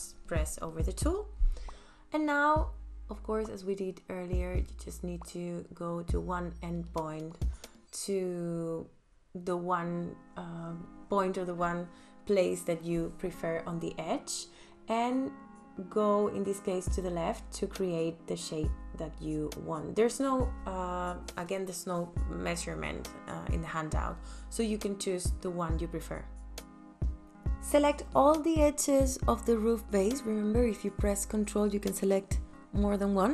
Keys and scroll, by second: 3.1 a, 24.2 space.